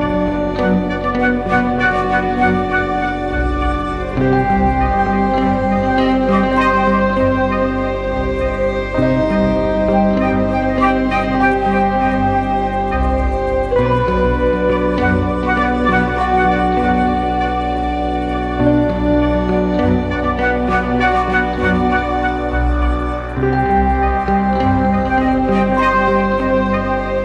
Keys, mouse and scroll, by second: 0.2 right click.